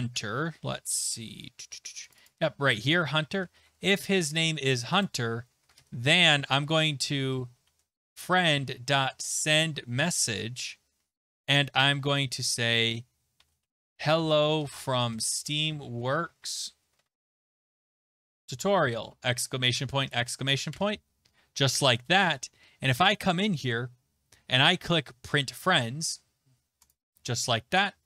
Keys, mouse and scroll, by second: 0.2 click, 0.4-1.9 scroll, 2.1 click, 2.3 click, 3.3 middle click, 3.6 ctrl+alt+c, 3.6 alt+Tab, 4.1 ctrl+c, 4.1 alt+Tab, 4.1 middle click, 4.1 click, 4.3 ctrl+v, 5.0 click, 5.6 typing, 5.8 Return, 6.9-9.8 typing, 11.3-19.4 typing, 20.0 Right, 20.7 typing, 21.8 ctrl+s, 22.2 alt+Tab, 23.2 click, 26.1 click, 26.9 click.